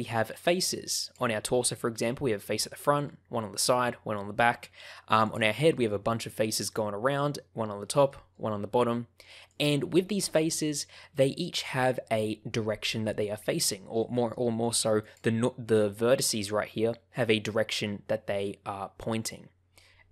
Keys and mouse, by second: 1.0 click, 1.5 middle click, 2.8 middle click, 3.5 middle click, 4.3 middle click, 5.1 click, 5.5 middle click, 8.0 middle click, 8.8 middle click, 9.4 click, 11.0 middle click, 14.0 middle click, 16.2 middle click.